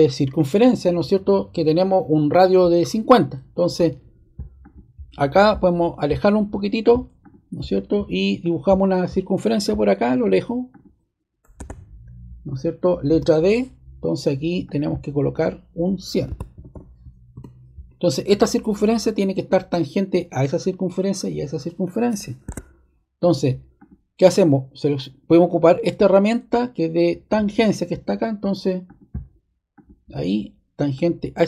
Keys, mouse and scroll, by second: 4.6 click, 7.2 click, 8.4 click, 9.4 click, 10.7 click, 11.5 ⟲, 13.0 d, 14.6 click, 15.3 click, 16.0-17.2 typing, 17.3 Return, 22.4 ⟲, 23.1 click, 28.8 click, 29.7 click, 30.9 click.